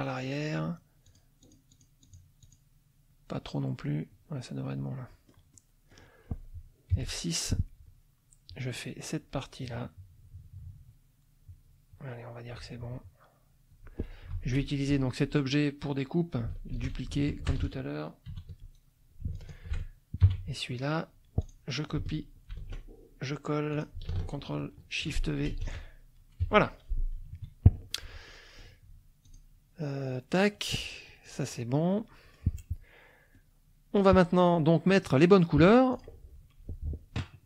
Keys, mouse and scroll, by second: 1.1 click, 1.4 click, 2.4 click, 4.6 middle click, 5.5 scroll up 1, 5.6 middle click, 6.1-6.9 scroll up 1, 6.9 F6, 7.1 click, 8.5-13.9 drag, 14.3 F2, 14.9 click, 16.7 ctrl+d, 17.3 ctrl+shift+click, 19.3 shift+click, 21.4 click, 22.5 ctrl+c, 23.7 ctrl+click, 25.5 ctrl+shift+v, 26.4 F1, 27.2 KP_Subtract, 28.1 F1, 28.2 middle click, 29.2 click, 31.3 click, 31.9 click, 33.3 click, 35.9 click.